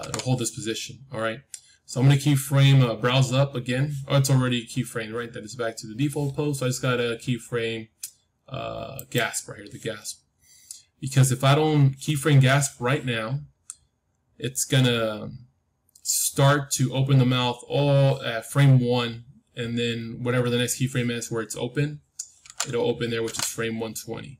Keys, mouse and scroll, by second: 8.9-11.8 drag.